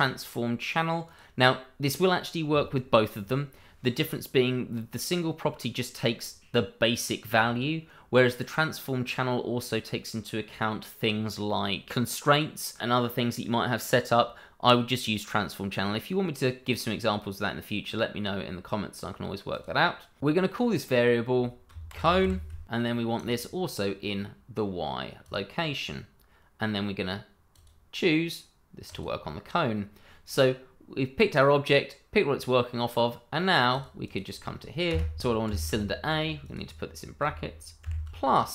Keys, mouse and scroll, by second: 0.0 click, 19.5 click, 22.0 shift+c, 22.0 o, 22.2 e, 22.6 click, 25.2 click, 27.5 click, 29.0 click, 33.7 click, 34.0 double click, 34.6 BackSpace, 35.4 shift+9, 36.4 click, 37.8 shift+=.